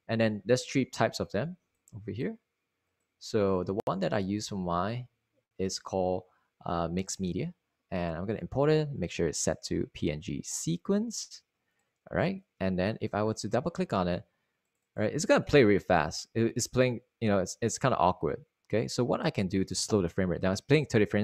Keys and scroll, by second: 6.5 Down, 6.7 Down, 7.2 Right, 9.1 Right, 14.6 Return, 16.3 Return, 17.8 0.